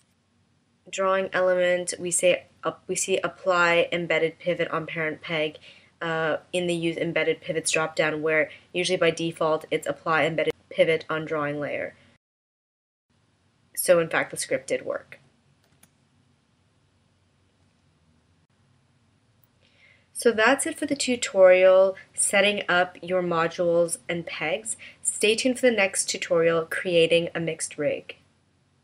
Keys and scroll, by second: 15.9 BackSpace.